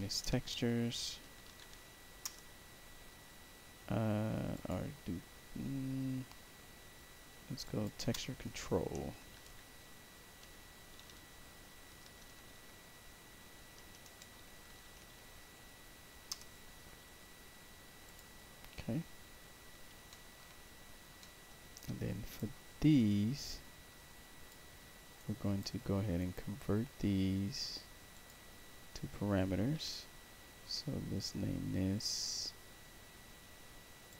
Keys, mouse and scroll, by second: 0.0-2.1 typing, 2.1 Return, 4.4 click, 7.5 click, 9.0-10.3 typing, 11.6-12.6 typing, 13.7-15.5 typing, 16.2 Return, 18.0 click, 18.6-19.6 scroll down 5, 20.0 alt+middle click, 20.5 middle click, 21.1 middle click, 21.7 right click, 23.4-24.4 drag, 24.7 middle click, 25.1 right click, 26.1 right click, 28.0 click, 34.0 click.